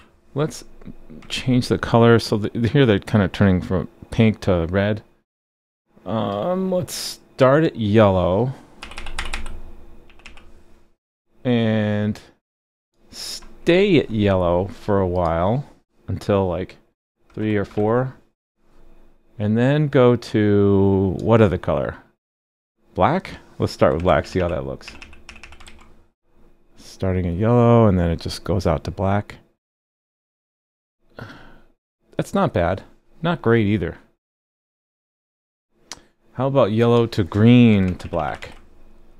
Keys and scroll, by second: 1.3 super+s, 25.7 super+s, 38.4 super+s.